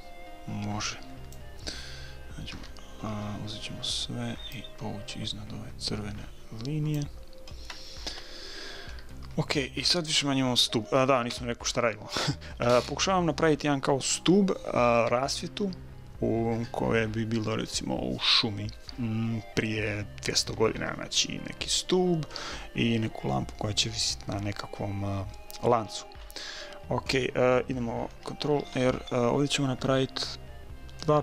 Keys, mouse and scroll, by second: 2.5 a, 3.1 a, 4.5-6.3 drag, 8.1 a, 8.1 s, 9.1-10.8 middle drag, 11.3 KP_1, 25.9-28.5 middle drag, 28.6 ctrl+r.